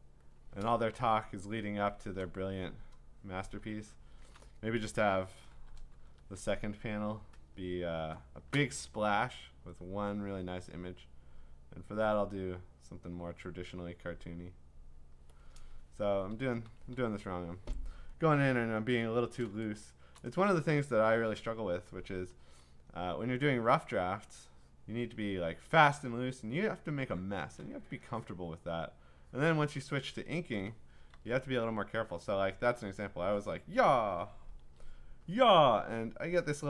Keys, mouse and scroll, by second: 0.6 click, 0.8-1.4 click, 1.3 click, 1.4 click, 1.5 click, 1.6-2.1 click, 2.3 click, 3.4 click, 4.1 click, 4.2 click, 4.4 click, 5.5 ctrl+-, 5.7 ctrl+-, 5.9 ctrl+-, 6.4-7.2 click, 6.9 click, 7.6 click, 11.4 click, 12.8 click, 14.2 click, 15.1 click, 16.2 ctrl+z, 16.5 ctrl+z, 16.8 ctrl+z, 18.1-19.2 scroll, 20.2 click, 22.3-22.7 click, 24.8 click, 26.3 click, 27.5 click, 27.5 click, 28.4 click, 29.5 click, 31.1 ctrl+z, 33.4 click, 34.6 ctrl+z, 35.4 click.